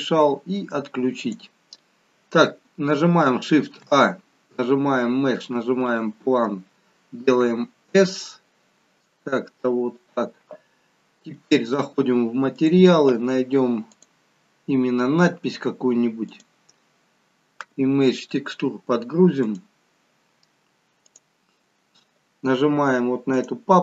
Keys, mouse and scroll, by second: 1.2 click, 3.8 shift+a, 7.3 s, 12.5 click, 13.8 click, 19.5 click.